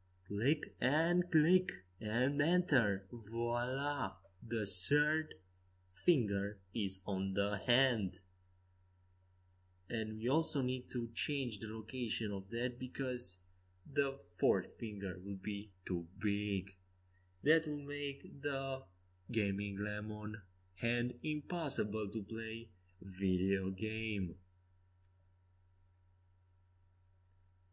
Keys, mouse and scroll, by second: 0.5 k, 4.8-6.6 middle drag, 8.4-10.2 drag, 9.8-12.1 right drag, 10.9-12.7 drag, 12.7 middle click, 13.4-15.1 drag, 13.4-14.4 right drag, 14.3 middle click, 14.7-17.2 middle drag, 14.7 right click, 17.2-19.0 drag, 18.6-21.1 middle drag, 21.1-24.9 drag, 21.1-24.3 right drag, 22.7-24.3 middle drag, 24.9 right click, 25.3-26.8 middle drag.